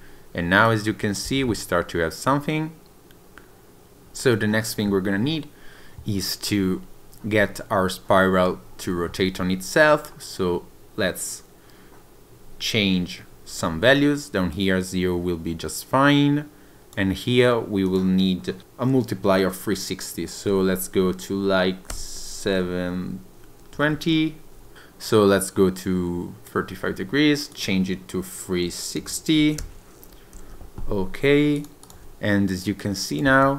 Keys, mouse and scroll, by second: 0.7 click, 1.3 space, 7.6-9.0 scroll down 1, 14.6 click, 17.9 click, 25.1 click, 27.5 click, 31.6 click, 31.9 click, 33.0 click, 33.3 space.